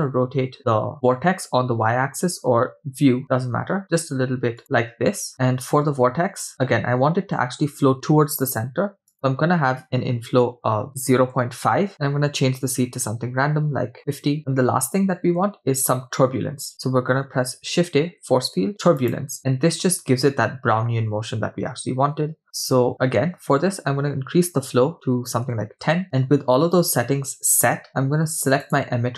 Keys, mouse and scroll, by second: 9.1-14.4 drag, 17.1 shift+a, 22.9-26.0 drag, 28.7 click.